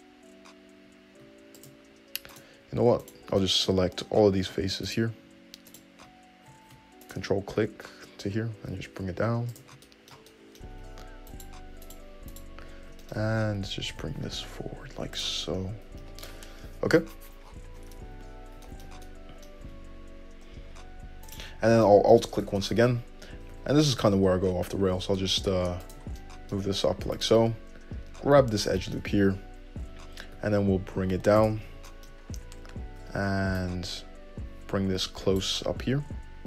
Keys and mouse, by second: 0.1 g, 2.6 click, 2.6 middle click, 3.3 alt+click, 4.4 2, 4.7 3, 5.1 click, 5.9 click, 7.3 ctrl+click, 7.7 `, 8.9 g, 9.8 `, 10.3-11.5 middle drag, 11.0 2, 11.5 click, 11.7 middle click, 12.1 click, 12.1 middle click, 12.6 click, 12.6-13.9 middle drag, 12.9 `, 14.1 g, 15.4 `, 16.1 Tab, 18.3 Tab, 19.9 `, 21.5 alt+click, 22.5 `, 23.7 e, 26.0-27.4 shift+middle drag, 27.4 click, 27.4-33.8 middle drag, 28.5 `, 30.6 g, 33.2 1, 33.8-36.4 drag.